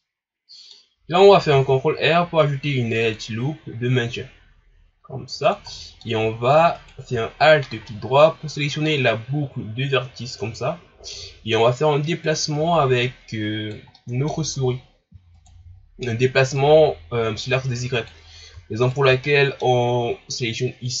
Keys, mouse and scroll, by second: 0.0-1.5 middle drag, 1.5 ctrl+r, 5.7-6.8 middle drag, 6.8 alt+right click, 7.3-7.9 scroll down 1, 7.9-10.9 middle drag, 11.1-12.2 middle drag, 12.2-13.9 drag, 13.9 middle click, 14.7-15.3 scroll up 1, 15.3 alt+right click, 16.6-18.8 drag, 18.8 alt+right click, 19.2-21.0 middle drag.